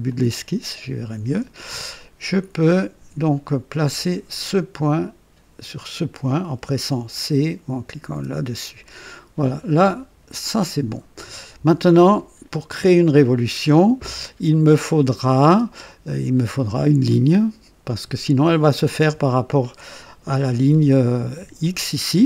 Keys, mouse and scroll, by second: 0.0 click, 1.9 right click, 3.8 click, 5.8 click, 8.1 c, 10.8 click, 13.6 typing, 15.0 click, 15.4 typing, 17.8-18.5 right drag, 20.0-20.9 typing.